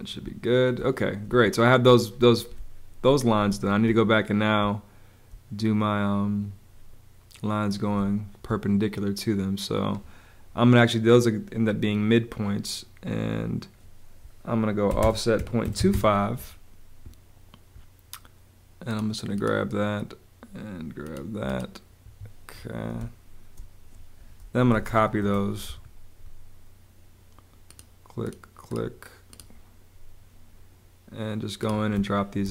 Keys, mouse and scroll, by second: 0.2 space, 2.5 space, 7.9 space, 14.6-16.2 typing, 22.0 Escape, 22.9 space, 24.4-25.4 typing, 31.8 space.